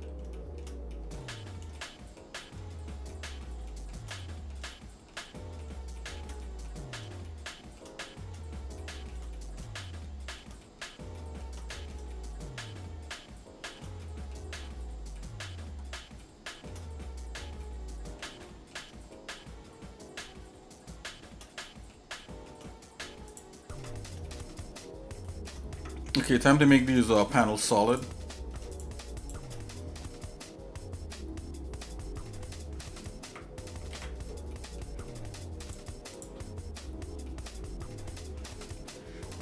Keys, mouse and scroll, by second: 0.4 shift+middle click, 0.9 shift+middle click, 1.2-1.6 scroll down 2, 1.8 shift+middle click, 2.4 shift+middle click, 3.1 shift+middle click, 3.7 shift+middle click, 4.2 middle click, 4.7 shift+middle click, 5.4 middle click, 6.0 shift+middle click, 6.4 shift+middle click, 7.3 shift+middle click, 8.8 shift+middle click, 9.3 middle click, 9.8 shift+middle click, 10.6 scroll down 1, 10.6 middle click, 10.9 scroll up 1, 11.2 shift+middle click, 11.7 shift+middle click, 12.1-13.8 shift+middle drag, 14.1 middle click, 14.6-15.1 scroll up 2, 15.2 middle click, 15.5 scroll down 2, 16.2 shift+middle click, 17.0 middle click, 17.6 shift+middle click, 18.5 middle click, 19.1-21.5 shift+middle drag, 21.7 middle click, 22.2 shift+middle click, 23.3 click, 23.8 Tab, 24.3-25.5 shift+middle drag, 25.8 Tab, 26.3 middle click, 27.0 middle click, 27.9 click, 28.7 shift+click, 29.6 click, 34.2 alt+c, 34.5 middle click, 35.1 scroll down 1, 35.6 click, 36.2 click, 36.8 scroll up 2, 37.3-38.4 shift+middle drag.